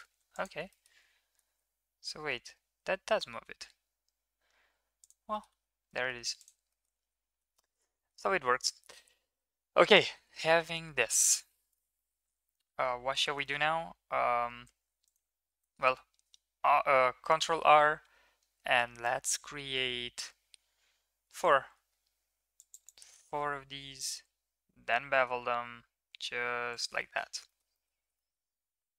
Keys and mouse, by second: 0.3 alt+click, 0.7 middle drag, 1.3 g, 5.5 Tab, 5.9 middle drag, 6.7 middle click, 7.0 ctrl+s, 7.5 shift+middle click, 7.7 middle click, 8.0 middle click, 10.5 shift+middle drag, 10.8 Tab, 11.2 shift+middle click, 11.4 middle click, 11.7 middle click, 12.6 KP_7, 13.4 shift+middle click, 15.5 ctrl+r, 24.1 ctrl+b, 27.0 middle click, 27.2 click, 27.6 shift+click, 27.9 click, 28.2 shift+click.